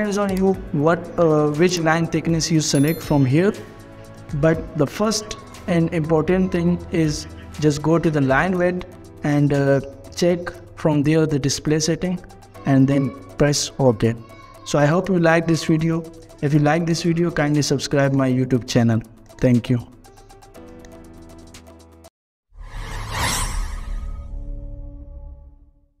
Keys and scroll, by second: 5.9 Escape.